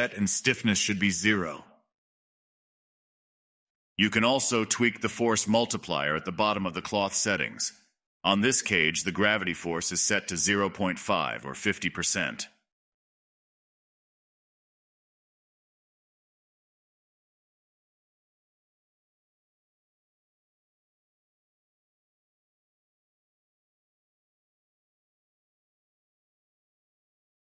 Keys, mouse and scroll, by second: 1.4-1.8 scroll up 2, 1.8 middle click, 1.9-2.5 scroll down 1, 2.5 click, 2.7 space, 3.0 space, 4.8-5.9 drag, 5.9 BackSpace, 8.0 click, 8.3 space, 10.1 space, 10.7-20.5 drag, 21.7 click, 22.0 space, 23.2 middle click, 24.1 scroll down 1, 24.2-27.3 middle drag.